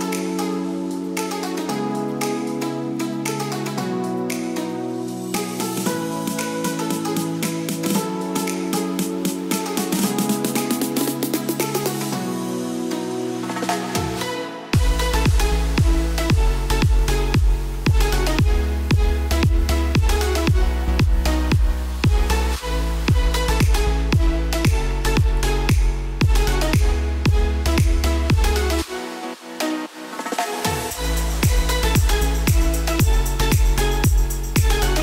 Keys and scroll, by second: 2.9 Return, 3.4 a, 7.2 b, 11.1 ctrl+z, 13.6 shift+5, 15.1 Return, 16.0 s, 18.4 shift+5, 20.3 b, 23.9 shift+5, 25.4 Return, 26.6 s, 33.1 ctrl+g.